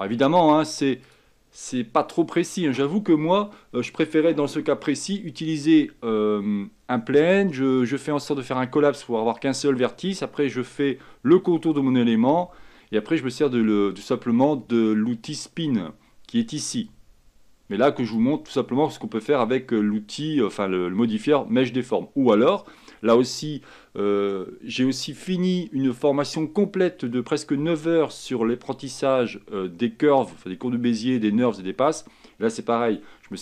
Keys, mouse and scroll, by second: 10.8-13.8 scroll down 2, 17.0-19.7 drag.